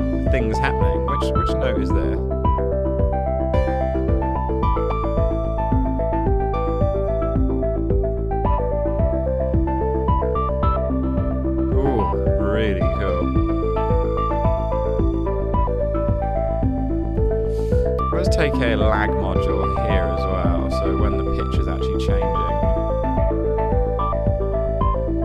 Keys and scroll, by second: 17.0-19.0 typing.